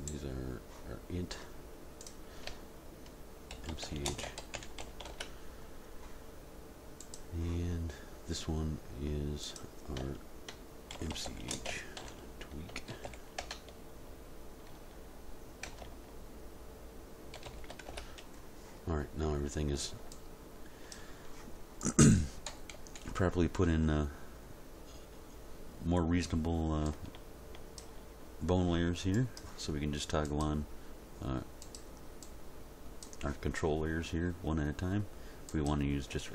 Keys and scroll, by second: 3.5-4.8 typing, 5.1 Return, 10.9-13.4 typing, 15.7 BackSpace, 17.3 shift+w, 17.4 shift+k, 17.9 Return, 22.5 End, 22.7 Page_Down, 23.0 End.